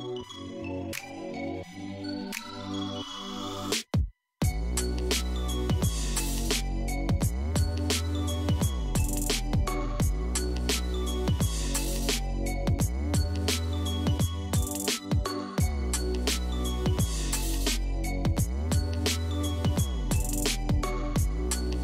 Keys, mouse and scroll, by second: 0.0-3.1 drag, 6.6 ctrl+z, 11.1-15.1 drag, 16.1-16.7 scroll down 1, 16.7-19.7 middle drag, 19.8 scroll down 2, 20.3-21.8 middle drag.